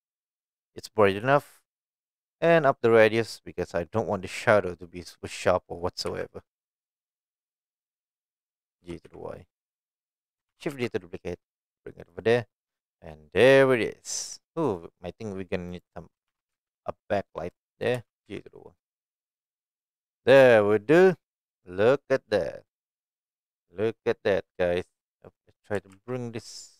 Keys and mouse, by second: 2.3-3.7 drag, 5.3 g, 6.1 x, 8.2 click, 8.8 g, 9.0 y, 10.2 click, 10.5 shift+d, 10.7 x, 12.0 click, 12.8-14.4 middle drag, 14.8 middle click, 15.7 click, 16.3 shift+d, 16.5 x, 17.7 click, 17.9 g, 18.2 y, 19.9 click, 20.4-21.0 middle drag, 21.6-22.3 middle drag, 22.8-23.9 middle drag, 25.3 click, 25.7 g, 25.9 x.